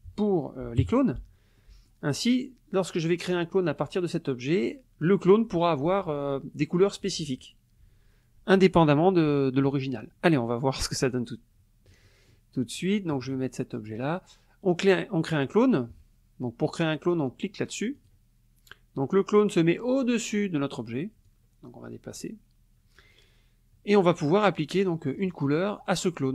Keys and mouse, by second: 0.8 KP_Subtract, 1.6 middle click, 11.1-12.5 drag, 13.0 click, 18.0 click, 21.2-24.2 drag, 24.5 middle click, 24.9 click.